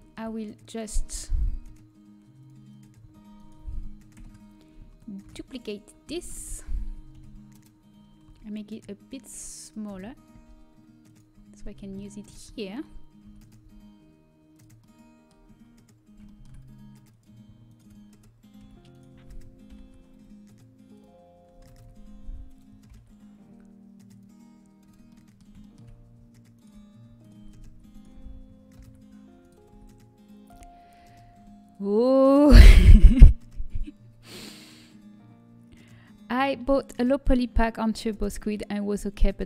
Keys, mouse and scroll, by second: 2.1 Tab, 2.3-4.1 drag, 4.1 ctrl+KP_Add, 5.8 shift+d, 7.1 KP_1, 8.3 s, 9.8 z, 10.3 g, 11.9 z, 14.3 s, 14.7-17.0 middle drag, 17.0-20.9 drag, 17.6 middle click, 17.6-20.9 right drag, 20.9 alt+m, 20.9 e, 21.6 ctrl+z, 23.7 alt+m, 24.7-31.3 middle drag, 26.5 click, 27.6 e, 31.3 alt+m, 31.3 a.